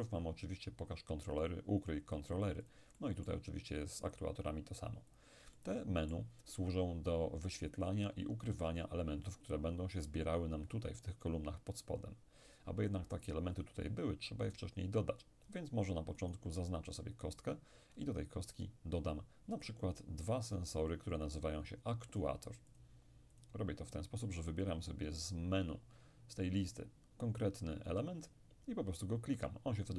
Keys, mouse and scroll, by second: 2.7-5.0 drag, 3.0-5.0 middle drag, 5.2-7.1 drag, 5.6-7.1 middle drag, 16.2 right click, 18.5-19.6 scroll down 1, 19.6 click, 22.2-24.4 drag, 24.7 click.